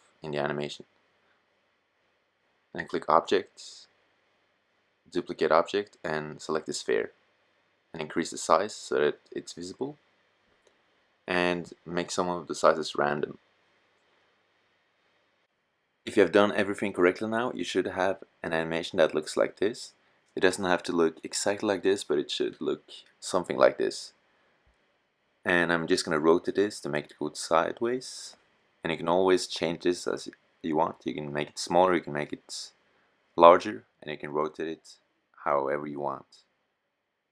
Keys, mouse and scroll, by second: 5.9-7.1 middle drag, 13.0-14.2 middle drag, 16.1 middle drag, 16.5-17.8 middle drag, 22.3 middle click, 26.0 middle click, 27.0 r, 28.7 s, 34.7-36.1 middle drag, 36.8 s.